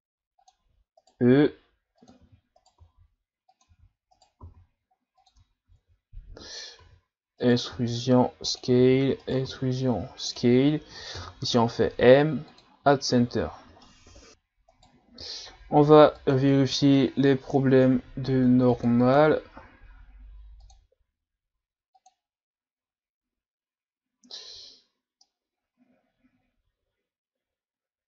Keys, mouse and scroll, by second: 5.7 ctrl+s, 6.9 e, 11.2 m, 13.2 Tab, 13.5 scroll down 2, 13.8 middle click, 14.3-14.7 scroll up 2, 14.7 right click, 16.2 click, 19.0 click, 22.9-24.3 scroll down 1, 25.2-28.0 middle drag.